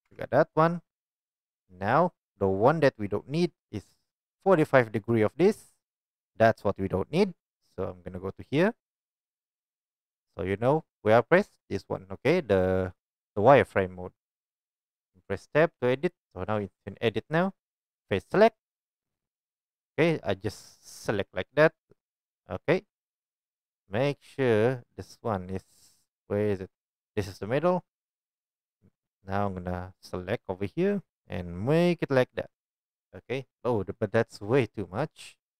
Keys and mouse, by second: 0.1 Tab, 9.3 click, 18.7-35.5 drag.